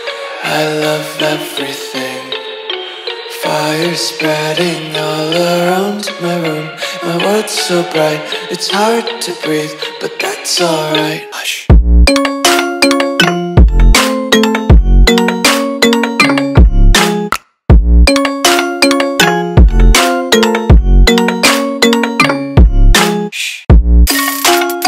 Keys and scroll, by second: 2.6 v, 7.8 a, 12.1 r, 14.6 a, 17.9 r, 20.4 a, 23.5 r.